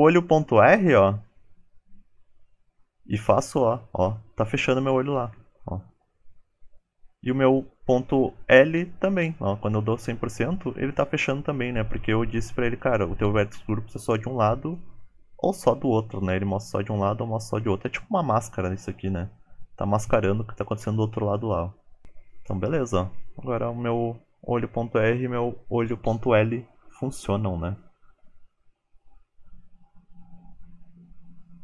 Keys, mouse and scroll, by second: 29.3 shift+middle click, 29.3 scroll up 4, 29.4 click, 30.1 Tab, 30.5 click, 30.7 Tab, 30.7 click, 30.9 click, 31.0 Tab.